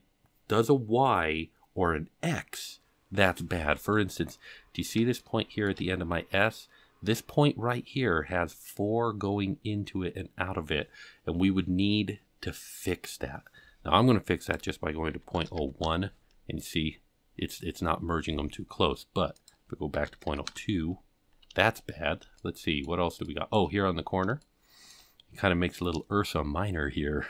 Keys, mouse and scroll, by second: 4.3-5.2 scroll up 7, 5.2 shift+middle click, 14.4-16.4 drag, 19.3-20.8 drag, 21.1-22.3 scroll down 8, 22.3 shift+middle click, 23.2 shift+middle click, 23.8-24.4 scroll up 5, 24.4 shift+middle click, 25.2 scroll up 2.